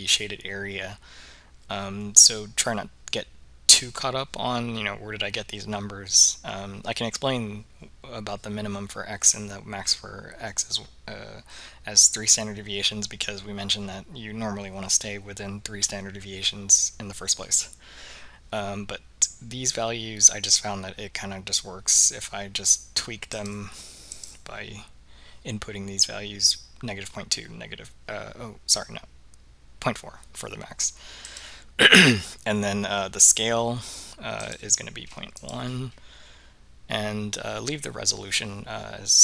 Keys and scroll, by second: 23.5 ., 24.2 4, 31.4 Return, 34.5 ..